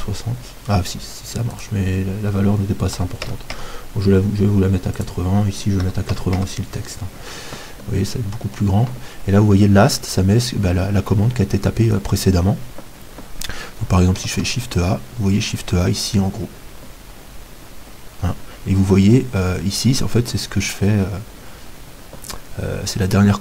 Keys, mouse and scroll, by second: 5.0-14.4 drag, 14.4 shift+a.